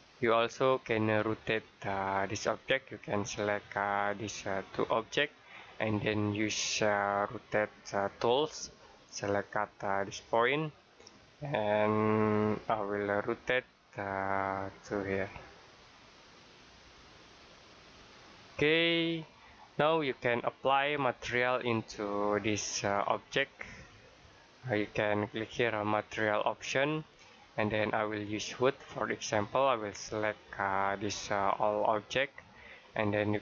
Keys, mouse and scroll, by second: 1.2-1.5 scroll down 1, 1.5-1.8 scroll up 1, 1.8-2.2 scroll down 1, 3.6 click, 4.5 click, 8.1 click, 14.2 click, 17.4 click, 18.5 middle click, 19.9-20.5 scroll down 1, 21.0 scroll up 1, 21.7 middle click, 26.3 click, 30.9 click.